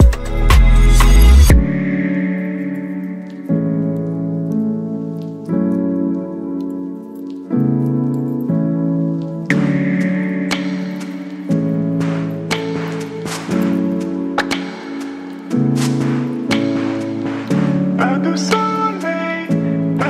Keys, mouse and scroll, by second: 0.1 ctrl+0, 2.6 Return, 3.2 click, 7.2 click, 9.6-20.0 drag.